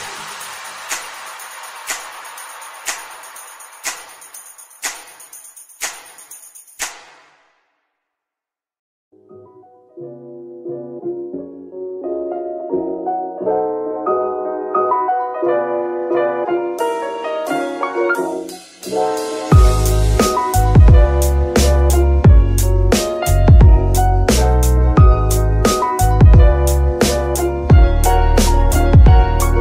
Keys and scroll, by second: 14.7 ctrl+Tab, 18.9 g, 19.4 Escape, 21.6 g, 21.9 Escape, 25.9 g, 26.2 Escape.